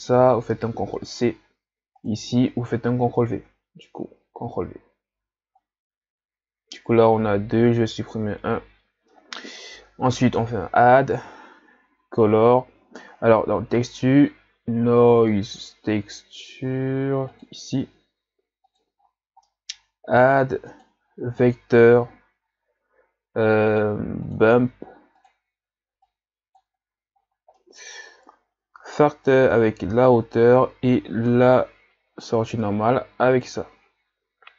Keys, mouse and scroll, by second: 2.0 click, 4.3 ctrl+v, 8.0 Delete, 10.2 click, 26.0 click.